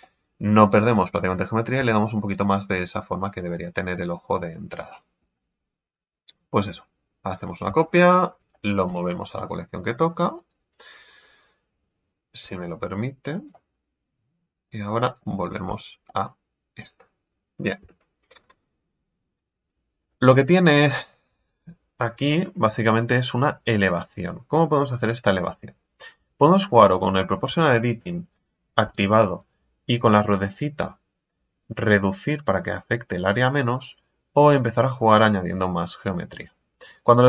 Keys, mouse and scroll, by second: 1.8 Tab, 2.0-5.1 middle drag, 8.0 shift+d, 8.8 m, 12.4 m, 14.5 click, 15.0 click, 15.7 Tab, 16.0 middle click, 17.0-17.8 scroll down 1, 17.8 KP_1, 18.7-19.6 scroll up 3, 19.6 right click, 20.1-23.1 middle drag, 23.9-26.4 right drag, 26.4-27.4 middle drag, 27.4 o, 28.8 o, 29.4-32.4 drag.